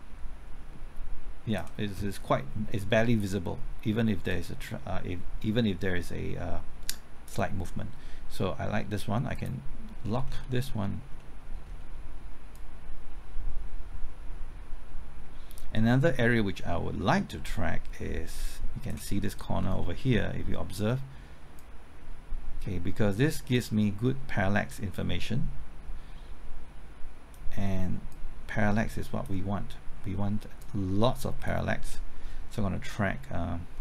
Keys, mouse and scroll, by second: 10.0 scroll down 1, 11.1 middle click, 11.6-12.5 scroll up 1, 12.5-19.2 drag, 19.2 scroll up 1, 19.8 middle click, 21.5-31.6 drag, 31.9-33.7 scroll up 1, 33.7-33.8 scroll down 1.